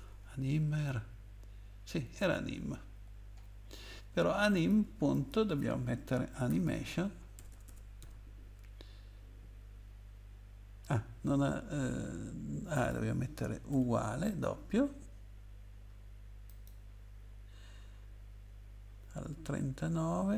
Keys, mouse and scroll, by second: 0.0 scroll up 2, 2.3 scroll down 2, 4.5 click, 5.1 click, 6.5-8.0 typing, 12.7 click, 13.7 =, 16.5 click.